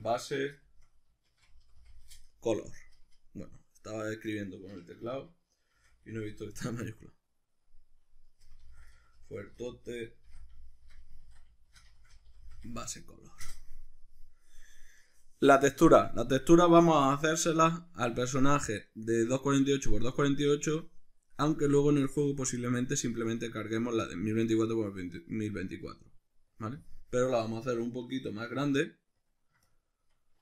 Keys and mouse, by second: 12.1-30.4 drag.